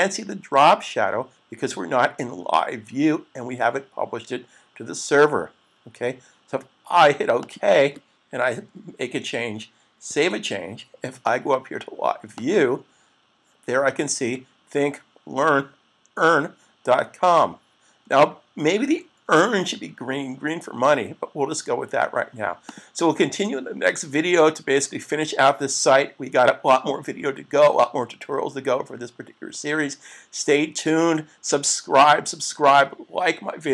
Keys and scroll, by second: 10.1 super+s.